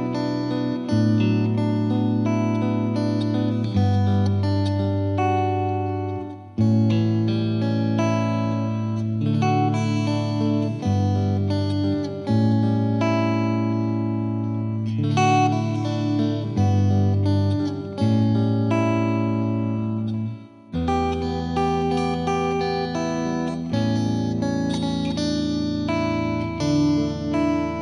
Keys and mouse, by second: 3.0-4.2 drag, 6.1-7.2 drag, 7.9 click, 9.6 click, 12.6 click, 15.7 click, 18.0 click, 20.0 click, 22.1 click, 22.5 click, 22.9 click, 24.1 click, 25.9 click, 26.9 click.